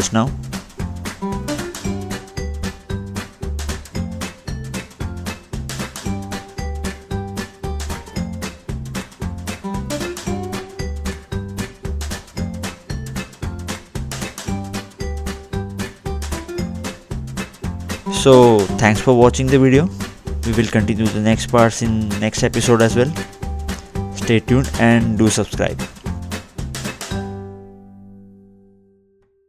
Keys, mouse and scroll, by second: 0.7 click, 4.0 scroll down 2, 4.7 click, 7.3 middle click, 8.3 scroll down 2, 9.3 click, 11.1-11.5 scroll up 2, 14.0 click, 15.7 scroll down 2, 19.7 click, 19.9 scroll up 1, 20.5 middle click, 21.3 scroll up 2, 22.5 click, 22.9-23.3 scroll up 2, 23.3 middle click, 23.9 scroll up 1, 24.1-24.8 scroll down 2, 24.8 middle click.